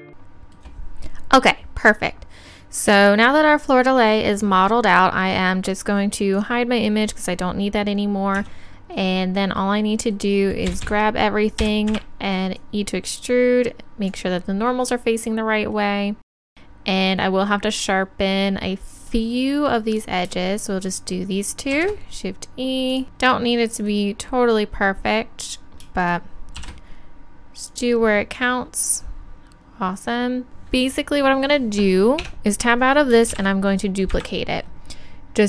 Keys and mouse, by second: 0.0 Tab, 6.4-8.3 drag, 8.4 Tab, 10.7 a, 11.7 e, 12.6-14.4 drag, 20.0-21.8 drag, 21.8 shift+e, 23.0-32.3 drag, 26.6 shift+e, 32.3 Tab, 33.4 shift+d.